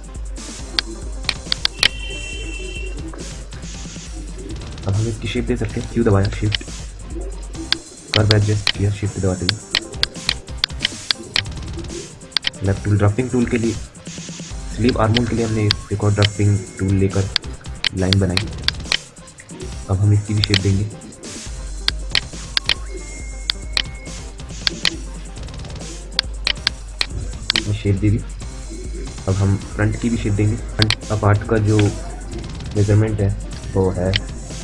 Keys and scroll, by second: 5.4 q, 13.2 d, 19.7 q, 31.5 Delete.